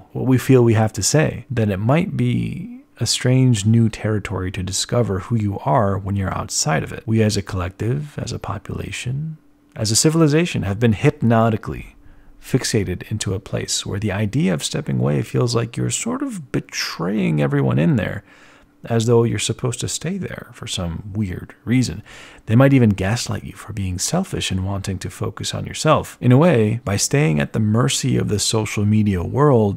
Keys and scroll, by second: 2.3 z, 3.5 z, 3.5 ctrl+alt+1, 4.9 ctrl+alt+1, 5.0 b, 22.4 z, 26.1 z, 27.8 b.